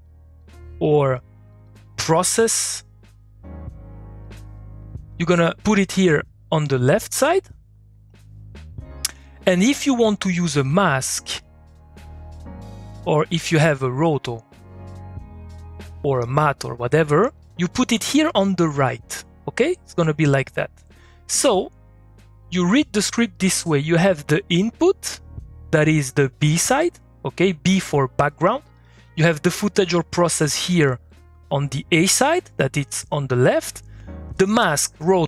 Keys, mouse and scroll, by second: 10.7 click, 25.3 click, 30.7 click.